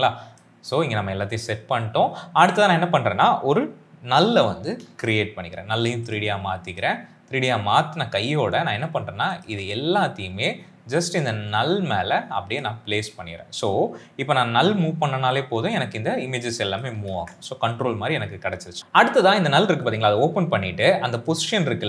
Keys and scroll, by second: 4.5 ctrl+alt+shift+y, 17.2 ctrl+z.